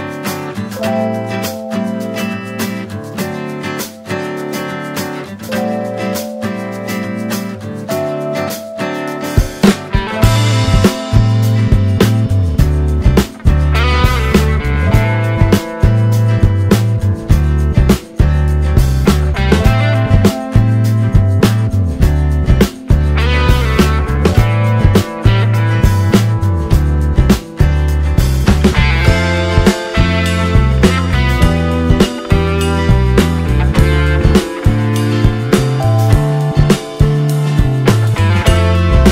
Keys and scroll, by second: 2.3 space, 11.6 space, 16.8 e, 18.3 ctrl+d, 33.4 4, 36.6 space.